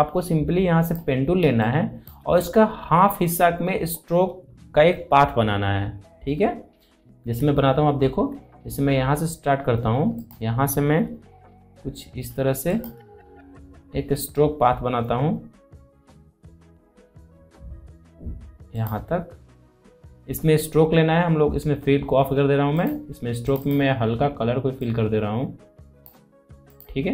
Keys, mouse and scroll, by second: 0.7 click, 1.2 space, 1.4 click, 1.7 space, 6.3-6.7 scroll up 1, 6.9 alt+scroll up 1, 7.9 alt+scroll up 1, 10.0 click, 12.5 shift+click, 18.5 click, 22.6-26.5 drag.